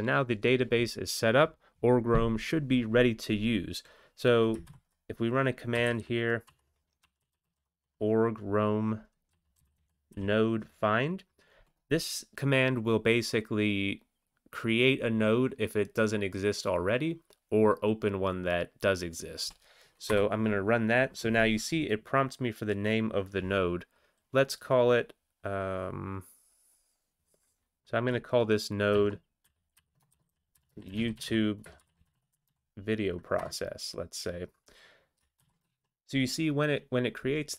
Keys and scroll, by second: 4.6 alt+x, 5.8-7.5 typing, 9.3-10.1 typing, 20.1 Return, 28.9-29.8 typing, 31.0-32.8 typing, 33.4 Return, 35.4 ctrl+x, 35.8 1.